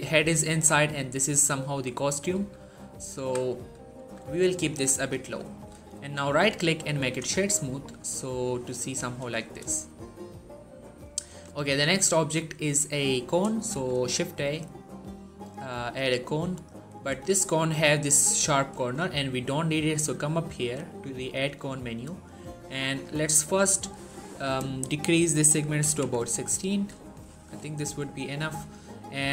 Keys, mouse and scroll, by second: 1.3-2.2 scroll down 1, 2.2 z, 3.0 z, 3.8 s, 4.4 click, 4.7 z, 5.0 scroll down 1, 5.3 shift+middle click, 6.2 right click, 6.8 click, 7.3 shift+middle click, 9.6-11.1 shift+middle drag, 13.5 shift+a, 16.0 click, 16.8 scroll down 1, 17.0 shift+middle click, 17.3-18.8 scroll up 1, 20.4 click, 23.0 click.